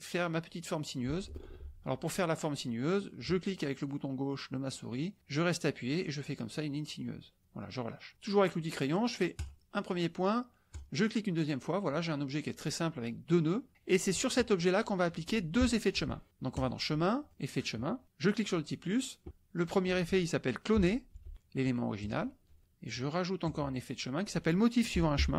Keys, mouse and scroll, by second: 1.5 ctrl+z, 3.2-7.4 drag, 9.4 drag, 10.7 click, 16.5 click, 17.3 click, 18.2 click, 19.6 click, 20.7 c, 21.1 l, 21.3 o, 22.0 click, 23.4 click, 24.9 m, 25.1 o.